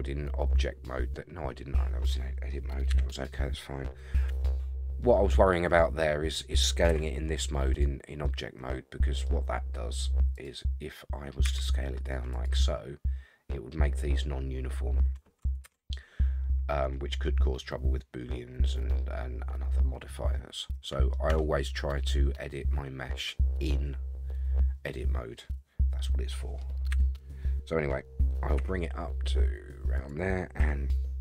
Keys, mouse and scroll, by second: 2.9 KP_1, 4.3 Tab, 4.9 scroll down 1, 5.0 middle click, 6.9 s, 8.2 scroll down 1, 8.2-9.2 middle drag, 10.3 click, 11.4 s, 15.6 ctrl+z, 15.6 ctrl+a, 20.3 middle click, 21.3 Tab, 21.8-26.6 middle drag, 26.9 KP_1, 28.6 g, 30.6 s.